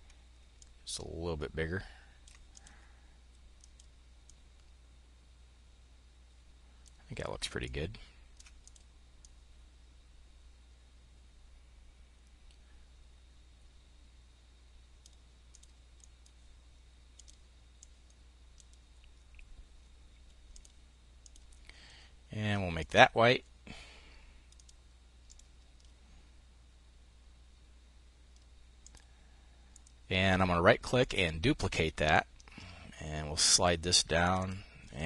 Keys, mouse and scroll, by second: 0.0-2.0 ctrl+drag, 3.1 click, 3.7-8.5 drag, 8.7-15.6 drag, 16.5 click, 17.2-18.2 drag, 19.9 click, 22.2 click, 23.9-25.2 drag, 28.2-29.2 drag, 30.5 click, 31.5-33.3 drag, 33.6 click.